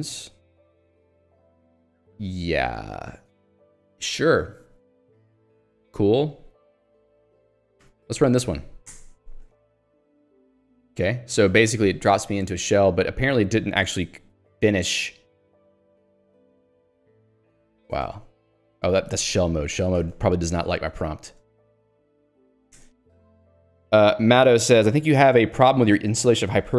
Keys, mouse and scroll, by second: 0.0 h, 1.6 j, 7.9 click, 9.1 r, 14.4 BackSpace, 18.0 ctrl+c, 19.2 ctrl+g, 21.3 Return, 22.2-23.1 typing.